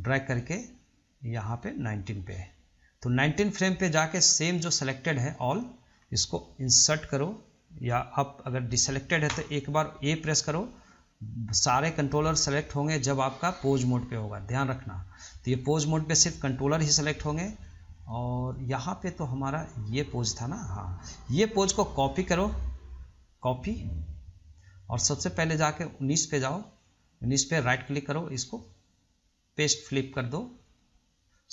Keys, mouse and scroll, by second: 0.0-3.1 drag, 11.1 ctrl+click, 15.5-17.2 middle drag, 17.2 scroll up 1, 17.5-19.4 shift+middle drag, 19.4-22.4 drag, 22.7-25.1 right drag, 25.1-27.8 drag, 27.8 right click, 28.2-31.5 right drag.